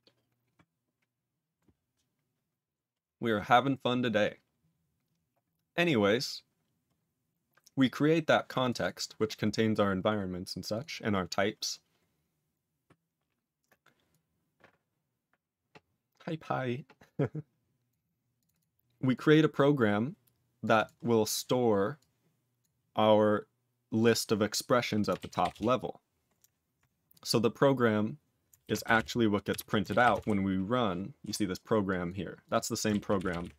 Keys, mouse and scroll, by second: 7.7 click, 8.2 click, 8.6 click, 8.7 double click, 10.7 click, 14.0 click, 17.8 click, 17.9 click, 18.4 double click, 19.5 click, 20.6 click, 20.7 double click, 21.2 click, 21.9 click, 22.5 click, 24.0 click, 25.4 Return, 28.9 Return.